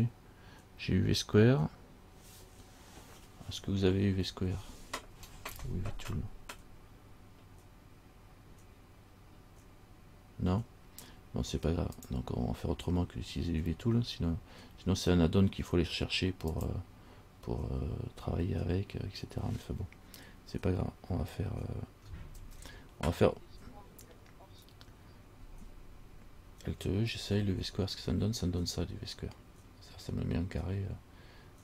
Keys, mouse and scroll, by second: 12.2 click, 16.7 click, 22.6 ctrl+z, 27.3 alt+e, 28.2-30.5 scroll down 2, 30.5 scroll down 2.